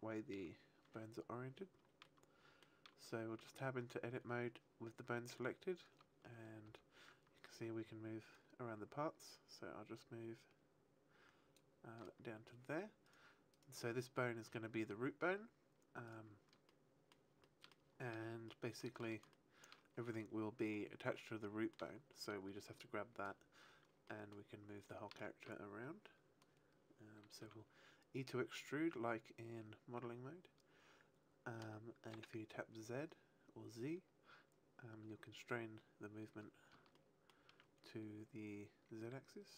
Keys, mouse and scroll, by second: 2.0 shift+middle click, 3.3 Tab, 6.6 g, 7.5 right click, 8.3 click, 13.0 right click, 13.5 right click, 16.0 right click, 16.6 shift+middle click, 17.3 shift+middle click, 18.4 shift+middle click, 19.3 shift+middle click, 22.2 shift+middle click, 24.0 shift+middle click, 24.8 shift+middle click, 27.4 e, 35.4 click, 36.9 shift+middle click.